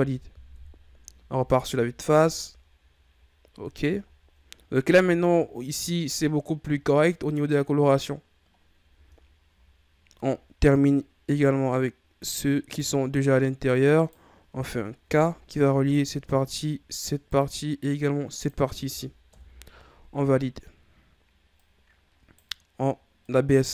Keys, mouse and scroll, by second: 0.5 KP_1, 1.3 a, 1.6-2.2 scroll down 3, 2.2 Tab, 2.7-3.1 scroll down 2, 3.1-3.6 scroll up 6, 3.6 Tab, 4.0-4.8 ctrl+scroll down 2, 4.8 Tab, 5.3-8.4 scroll down 3, 8.5-9.2 scroll up 4, 9.2-9.7 ctrl+scroll down 2, 9.7-10.4 scroll up 1, 10.4-11.3 ctrl+scroll down 2, 11.3 right click, 13.4 right click, 15.0 k, 21.5 right click, 23.2 right click.